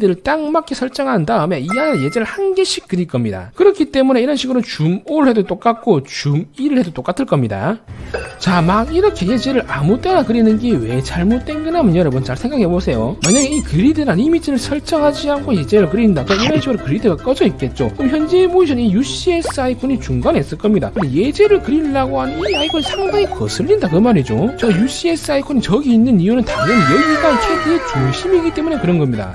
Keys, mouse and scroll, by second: 4.1 scroll up 1, 4.7 right click, 5.0 a, 5.3 right click, 6.4 right click, 6.8 e, 7.0 right click, 8.8 middle click, 9.3 middle click, 9.8 c, 10.4 right click, 10.6 click, 11.2 click, 11.4 middle click, 12.4 middle click, 18.0 middle click, 18.5 middle click, 19.1 scroll up 1, 19.5 scroll down 1, 20.9 middle click, 21.2 c, 21.4 right click, 21.7 right click, 22.4 right click.